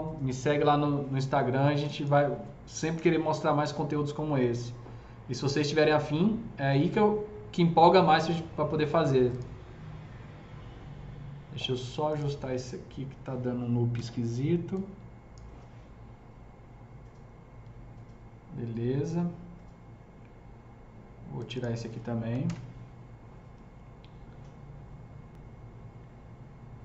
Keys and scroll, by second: 3.0 ctrl+BackSpace, 13.9 s, 22.4 ctrl+BackSpace.